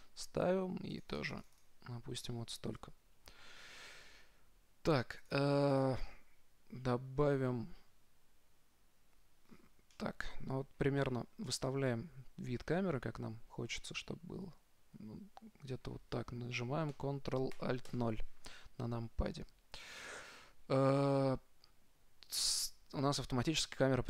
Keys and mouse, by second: 1.2-3.7 drag, 3.7-5.0 middle drag, 5.5-7.8 drag, 9.8 middle click, 13.6 middle click, 14.6 middle click, 18.1 ctrl+alt+KP_0.